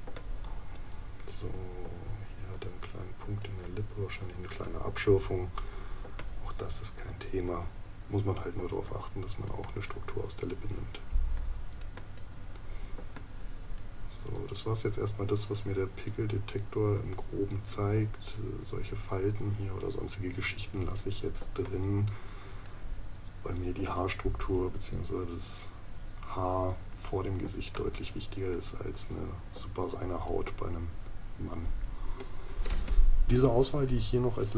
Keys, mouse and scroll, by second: 0.1 space, 6.0 space, 13.0 space, 21.4 space, 27.4 space.